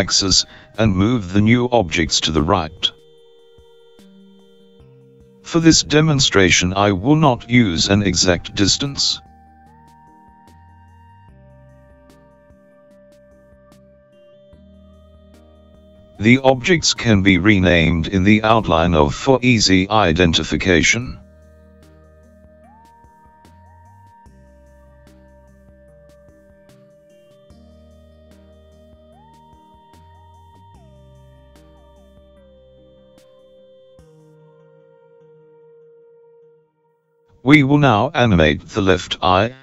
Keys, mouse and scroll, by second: 12.0 shift+middle click, 14.8 click, 16.8 click, 17.1 click, 17.2 click, 25.4 click, 27.9 click, 28.4 click, 28.5 click.